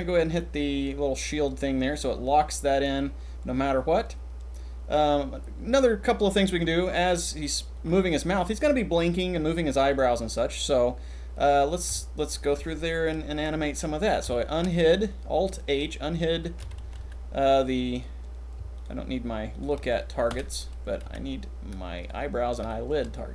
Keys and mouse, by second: 1.1 click, 6.0 click, 11.6-12.3 shift+middle drag, 13.3 alt+h, 14.2 shift+middle click, 16.5 a, 16.7 a, 16.9 c, 17.9 click, 18.7 shift+drag, 20.3 h, 21.0 c, 22.6-23.0 shift+middle drag.